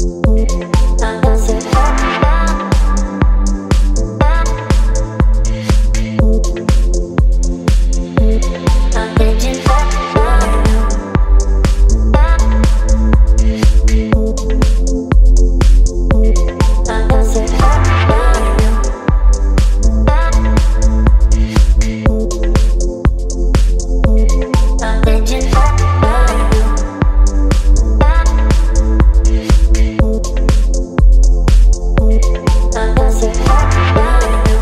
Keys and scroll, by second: 0.0 space, 0.0 Delete, 0.7 space, 2.4 ctrl+BackSpace, 2.9 space, 4.5 Delete, 5.2 Delete, 6.2 Delete, 7.2 space, 7.9 v, 8.3 ctrl+t, 13.8 Delete, 15.4 v, 17.7 space, 19.8 space, 22.1 ctrl+BackSpace, 26.1 Delete, 26.6 space, 33.2 ctrl+BackSpace, 34.0 space.